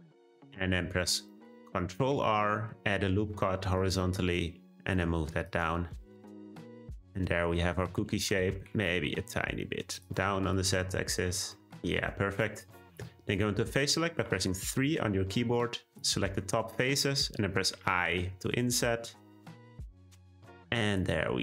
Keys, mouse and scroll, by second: 1.3 middle click, 2.0 r, 5.9 middle click, 6.3 click, 6.4 Tab, 6.6-8.0 middle drag, 8.0 Tab, 8.2 a, 8.5 s, 10.2 Tab, 10.4 click, 10.8-11.8 middle drag, 11.8 Tab, 12.1 scroll up 2, 12.4-13.0 scroll down 1, 14.2 3, 15.5 click, 16.4-17.7 middle drag, 17.7 i.